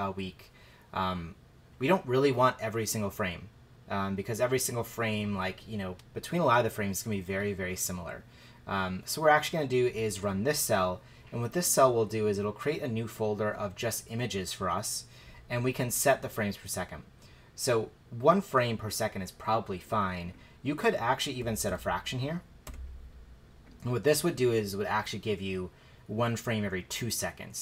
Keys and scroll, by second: 21.2-22.6 typing.